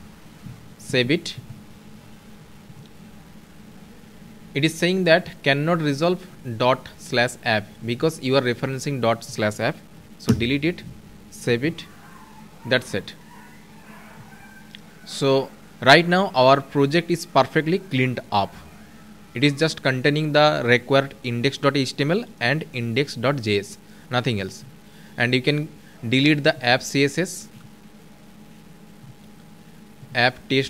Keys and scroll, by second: 11.1 ctrl+s.